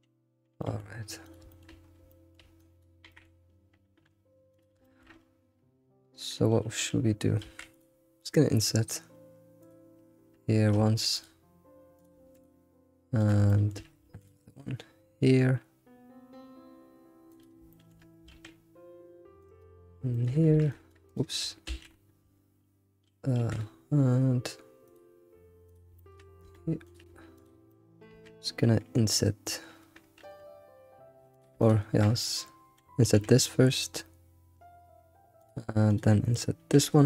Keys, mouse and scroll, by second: 0.5 g, 1.5 shift+middle click, 1.8-2.1 scroll up 3, 2.1-2.6 shift+middle drag, 2.6 click, 3.0 g, 4.8-7.4 shift+middle drag, 7.4 ctrl+r, 7.7 ctrl+r, 10.9 ctrl+r, 12.2 ctrl+r, 13.5 shift+middle click, 14.0 ctrl+r, 17.7 shift+middle click, 18.3 ctrl+r, 20.1 shift+middle click, 20.5 r, 21.5 right click, 21.7 ctrl+z, 23.4 ctrl+r, 26.0 shift+middle click, 26.4 Tab, 26.8 click, 27.4 shift+click, 27.7-30.7 shift+middle drag, 31.3 click, 31.6 shift+click, 35.9 click.